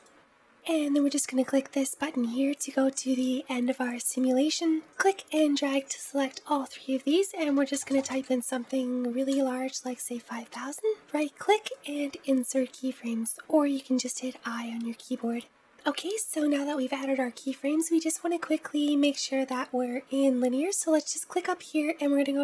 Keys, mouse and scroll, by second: 0.9-3.9 drag, 4.7-7.7 drag, 7.7 KP_0, 7.8 KP_0, 13.8 right click, 20.6-22.4 drag.